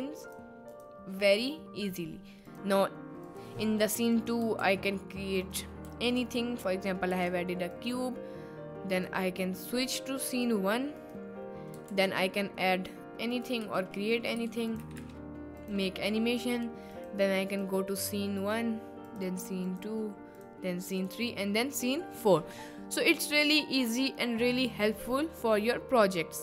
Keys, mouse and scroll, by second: 0.7 click, 2.5 click, 4.3 click, 4.6 shift+a, 5.9 a, 6.7-7.1 middle drag, 7.2 s, 9.4 click, 11.9 shift+a, 13.6 g, 14.4 s, 14.7 click, 14.9 r, 15.0 r, 17.0 click, 20.9 click, 25.0 click.